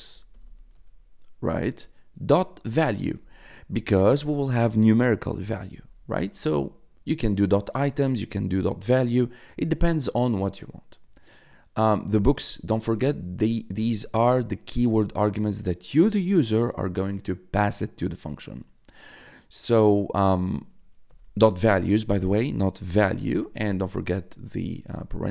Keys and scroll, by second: 0.0-1.0 typing, 2.0-3.9 typing, 5.0-6.4 typing, 20.3 shift+0, 20.7 BackSpace, 21.0 s, 23.0-24.6 typing.